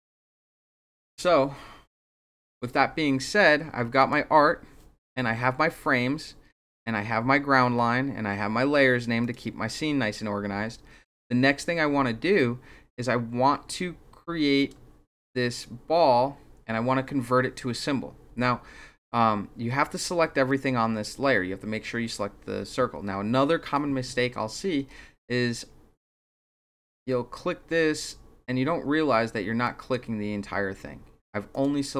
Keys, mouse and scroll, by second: 0.5 click, 4.0 click, 6.6 click, 9.2 click, 14.5 click, 15.5 click, 26.1 click, 29.6 drag, 31.5 click.